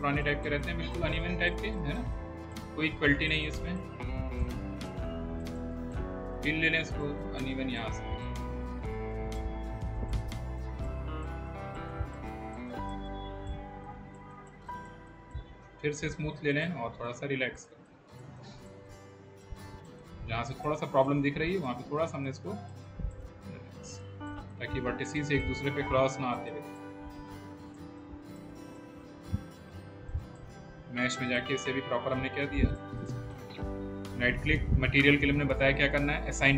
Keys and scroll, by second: 29.3 w.